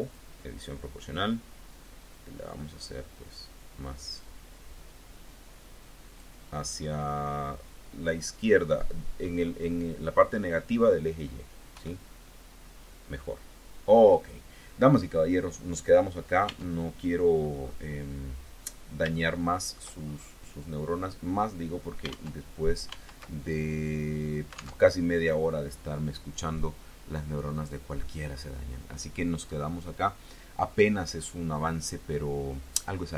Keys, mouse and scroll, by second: 2.5-3.4 scroll down 2, 11.5 KP_1, 13.9-14.8 scroll down 2, 14.8-15.1 scroll up 2, 15.1-15.5 scroll down 2, 16.3 Tab, 17.1-17.5 scroll up 2, 17.5-18.1 scroll down 4, 18.9 shift+click, 19.9-20.8 shift+scroll up 5, 20.8 scroll down 2, 22.1 alt+Tab, 22.7 alt+Tab, 24.7 alt+Tab.